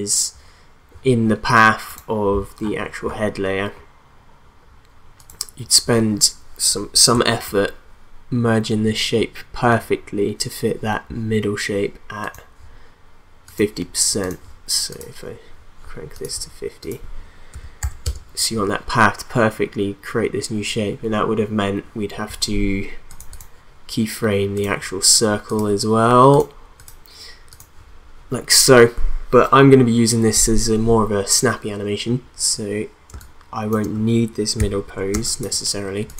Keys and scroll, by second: 17.5 5, 17.8 0, 18.0 Return, 33.1 space, 35.1 space.